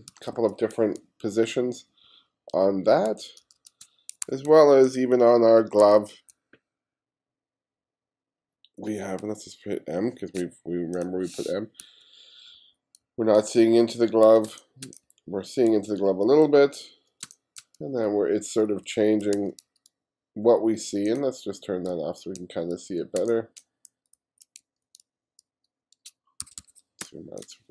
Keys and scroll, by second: 0.8 g, 3.1 f, 4.3 3, 5.9 2, 9.5 m, 11.9 f, 12.4 f, 13.0 g, 14.5 space, 15.1 f, 15.8 g, 17.3 space, 18.1 f, 19.4 g, 21.9-24.6 typing, 26.5 1, 27.0 space.